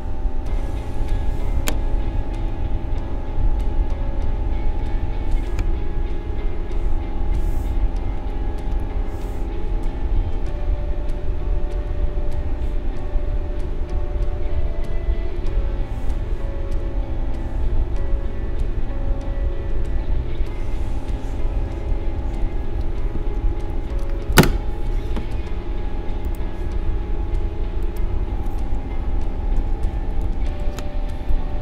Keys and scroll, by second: 20.3 space, 23.3 ctrl+-, 30.6 ctrl+shift+v.